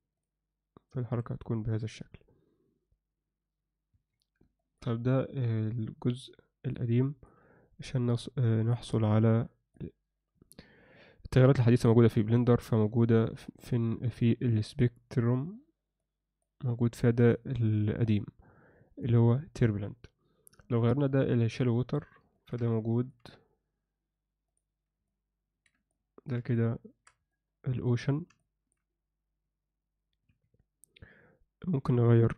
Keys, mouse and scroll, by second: 0.1 click, 4.4 ctrl+alt+Escape, 4.6 ctrl+middle click, 5.0-6.7 middle drag, 7.0 ctrl+middle click, 9.0 click, 14.7 click, 16.1 click, 17.2-21.6 drag, 22.3 ctrl+alt+middle click, 22.7 alt+middle click, 25.1 alt+middle click, 25.9 ctrl+alt+middle click, 26.5 shift+middle click, 27.3 ctrl+alt+middle click, 28.4 alt+shift+middle click.